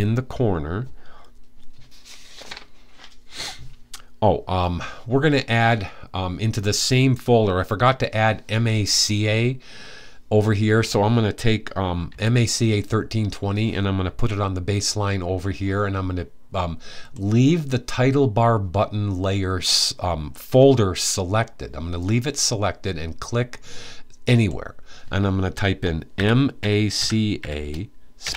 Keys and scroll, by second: 11.8 t, 25.6-28.3 typing.